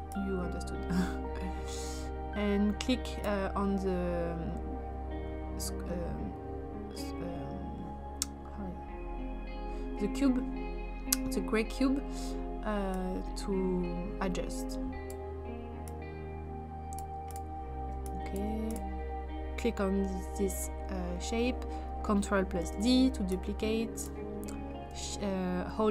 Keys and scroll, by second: 22.6 ctrl+d.